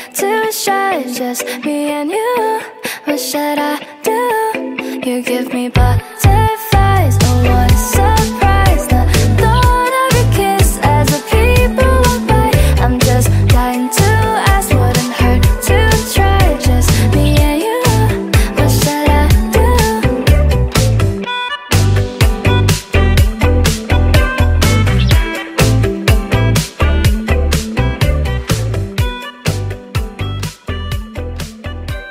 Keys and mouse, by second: 0.1 click, 0.3 4, 0.7 click, 1.1 alt+middle click, 1.2 alt+click, 1.3 alt+middle click, 1.5 click, 2.3 alt+right click, 2.5 click, 3.1 alt+right click, 3.2 alt+right click, 3.4 click, 4.5 alt+click, 6.2 click, 6.7 click, 7.7 click, 7.9 click, 8.5 click, 9.4 click, 10.1 click, 11.5 click, 12.5 click, 13.4 middle click, 13.6 click, 15.4 click, 16.3 1, 16.9 click, 17.2 2, 17.6 click, 18.1 5, 19.7 click, 20.3 3, 21.4 click, 25.7 click, 27.2 click, 29.5 click, 30.3 click, 30.6 click, 30.8 click.